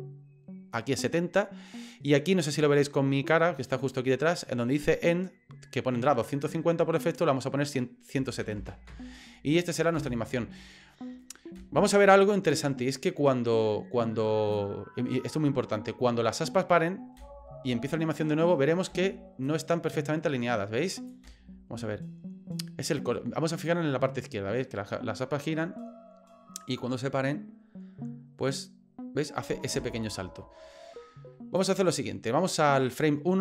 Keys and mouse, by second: 7.0-9.4 drag, 9.9 space, 11.5 space, 12.1-14.5 drag, 17.1 space, 18.9 space, 19.4-21.1 drag, 21.2 space, 29.7 space, 31.6 click.